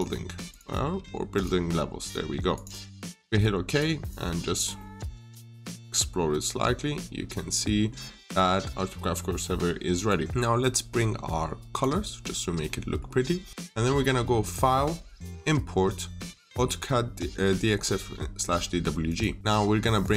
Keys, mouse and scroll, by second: 2.9-3.3 scroll up 1, 3.3 right click, 3.9 click, 4.6 middle click, 9.8 click, 12.5 middle click, 14.4 click.